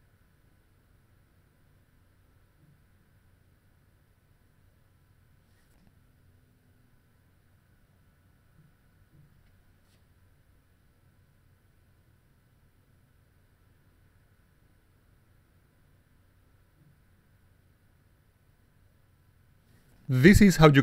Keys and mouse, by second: 1.5 click, 2.9 click, 3.0 click, 4.3 click, 7.3 click, 7.4 click, 8.7 click, 8.9 click, 9.6 click, 10.5 click, 10.6 click, 11.6 click, 11.7 click, 12.9 click, 15.4 click, 15.5 click, 16.1 click, 16.6 click, 18.0 click, 18.1 click, 19.4 right click, 20.1 click.